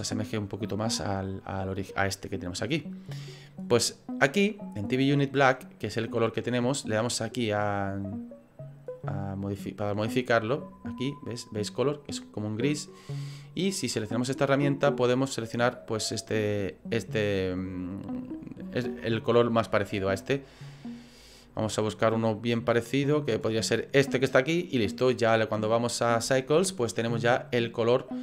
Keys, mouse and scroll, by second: 0.1-0.8 scroll up 2, 4.5 click, 9.8 click, 12.1 click, 18.7 click, 25.9 click.